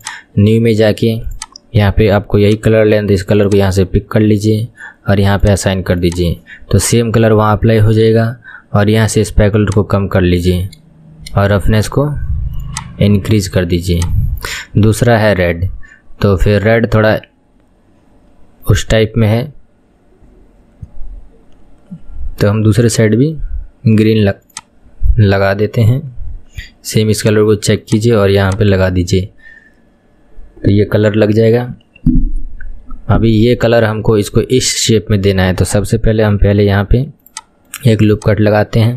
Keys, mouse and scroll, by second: 5.6 click, 9.8-14.1 shift+drag, 24.7 click, 27.2 drag, 28.0 click, 36.5 ctrl+r, 38.2 click.